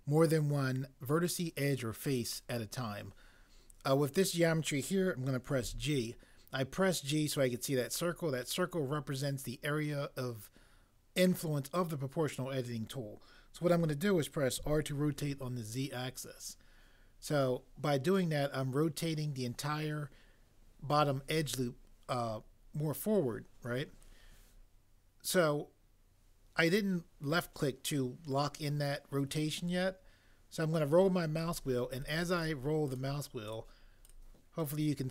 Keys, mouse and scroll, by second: 5.6 g, 14.6 r, 15.2 z.